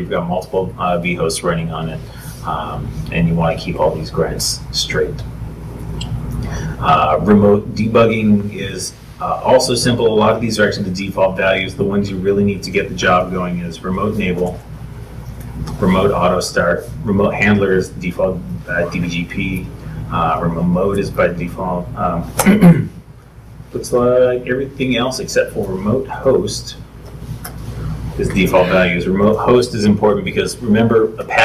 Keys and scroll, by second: 23.9 ctrl+k, 25.7 ctrl+u.